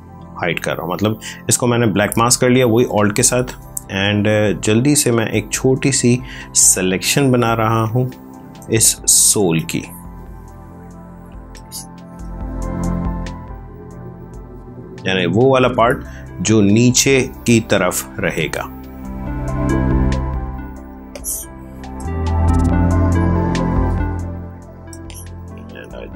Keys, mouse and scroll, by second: 7.7 click, 8.5 ctrl+space, 8.7 ctrl+click, 10.5 click, 11.4 space, 11.5 click, 11.9 space, 13.1 click, 16.4 click, 19.9 click, 20.8 space, 21.0 click, 21.3 space, 22.2 click, 24.8 space, 25.0 click, 25.3 space.